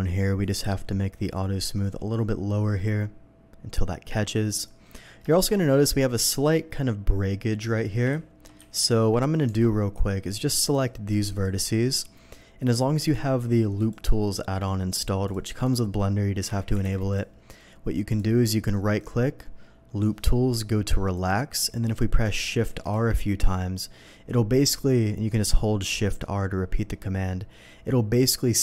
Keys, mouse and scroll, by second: 0.4 click, 1.3-4.5 drag, 4.8 middle click, 5.3 shift+middle click, 5.5 shift+middle click, 6.3 shift+middle click, 8.1 ctrl+z, 8.8 ctrl+z, 9.4 Tab, 9.8 middle click, 10.6 click, 11.3 ctrl+click, 13.0 ctrl+click, 13.8 ctrl+click, 15.2 click, 15.6 click, 16.4 l, 16.7 o, 17.1 click, 17.1 p, 18.1 click, 18.7 right click, 21.1 click, 22.4 shift+r, 22.9 shift+r.